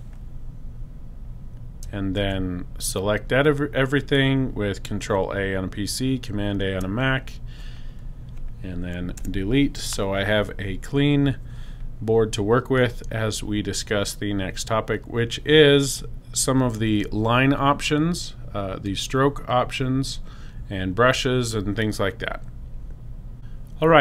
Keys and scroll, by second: 2.1 super+a, 9.1 BackSpace.